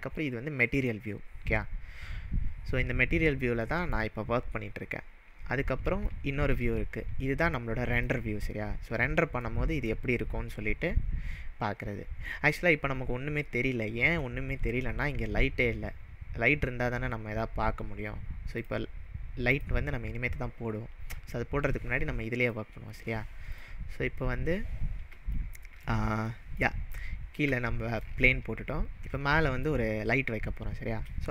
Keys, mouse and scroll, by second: 0.8 click, 3.7-4.2 middle drag, 5.1 scroll down 1, 5.8 scroll down 1, 6.1-6.6 shift+middle drag, 8.1 click, 9.5-10.0 middle drag, 14.5-15.0 scroll down 1, 15.0-16.3 scroll down 1, 17.8 scroll down 1, 18.5 click, 18.7 click, 19.6 click, 22.5 click, 23.5 click, 25.4-25.9 shift+middle drag, 27.0-27.3 scroll down 2, 27.5-28.3 shift+middle drag.